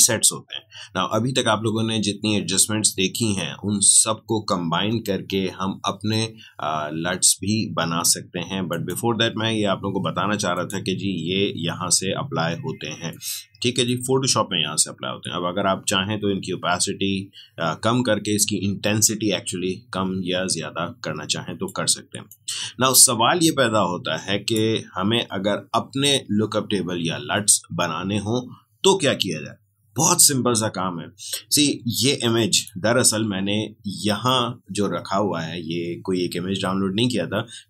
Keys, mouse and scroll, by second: 8.6 click, 13.0-27.1 drag, 32.5 click.